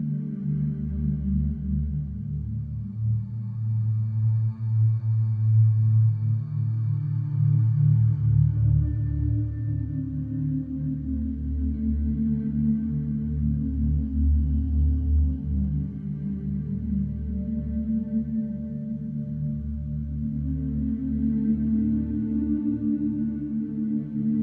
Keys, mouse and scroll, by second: 1.2 click, 2.8 click, 3.2-3.8 scroll, 4.8 click, 5.2-6.7 scroll, 6.7-7.1 scroll, 8.6 click, 9.9 click, 11.0 click, 12.0-15.1 drag, 14.1 Escape, 15.9-17.0 drag, 18.4-19.4 drag, 21.8 click, 23.1 right click.